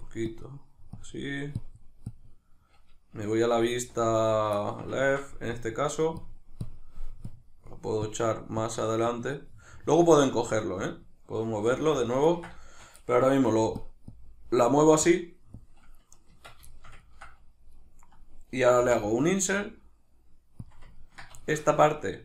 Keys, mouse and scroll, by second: 3.5 alt+q, 3.5-4.6 drag, 4.6 shift+middle click, 5.5-9.4 drag, 9.4-10.8 middle drag, 10.8-12.3 drag, 11.6 alt+q, 12.3-13.8 ctrl+middle drag, 13.4 f, 13.8 click, 16.3 Tab, 16.3-16.7 drag, 16.7-20.7 ctrl+shift+middle drag, 20.7 click, 21.0-22.2 ctrl+middle drag.